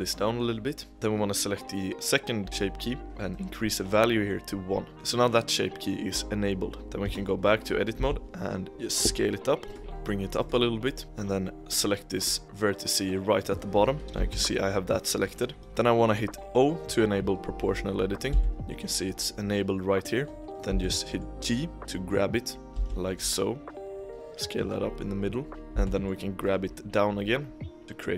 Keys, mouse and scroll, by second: 0.9 click, 3.2-5.2 drag, 6.8 scroll up 1, 7.0 Tab, 7.4-7.9 scroll down 1, 7.9 s, 9.8 g, 10.8-11.2 scroll up 4, 10.9 middle click, 11.2 middle click, 12.1 click, 12.4-14.0 middle drag, 14.0 scroll up 2, 14.1 g, 18.2 o, 20.4 scroll down 1, 20.6 g, 22.6 g, 22.7 s, 25.7 g.